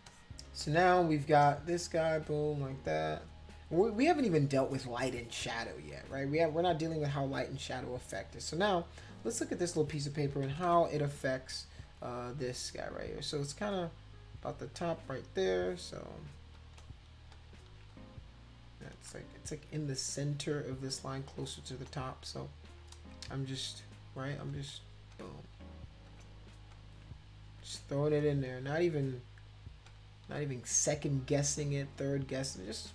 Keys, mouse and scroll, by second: 0.0 space, 0.1 click, 0.6 click, 3.7 space, 10.5 [, 10.7 [, 16.6 click, 17.3 shift+click, 18.9 ctrl+z, 21.7 click, 22.2 shift+click, 24.5 click, 25.1 shift+click, 26.1 click, 26.7 shift+click, 27.6 click, 28.2 shift+click, 29.9 shift+click, 32.5 click.